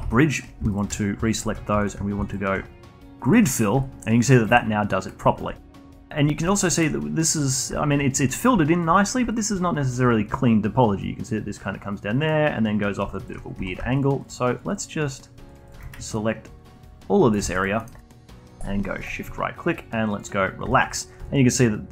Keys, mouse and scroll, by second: 0.0 a, 0.7 alt+shift+click, 2.2-3.8 shift+right drag, 3.8-6.7 alt+drag, 6.7-7.7 alt+middle drag, 7.7-12.9 alt+drag, 13.2 alt+click, 13.5 3, 13.9 shift+click, 14.2 shift+click, 14.5 shift+click, 14.7 shift+click, 15.0 shift+click, 15.5 shift+click, 15.6 shift+click, 16.1 ctrl+right click, 17.5 alt+click, 17.8 alt+middle click, 18.0-19.0 alt+drag, 19.0-20.7 shift+right drag, 20.7-21.9 alt+drag.